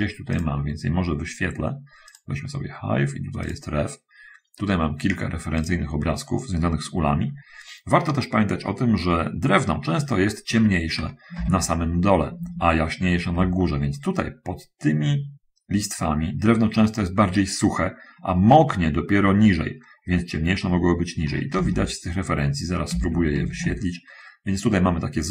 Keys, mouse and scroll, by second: 0.5 click, 2.4 click, 3.7 click, 11.7 alt+Tab, 12.6 alt+Tab, 21.9 alt+Tab, 23.2 alt+Tab, 23.6 alt+Tab.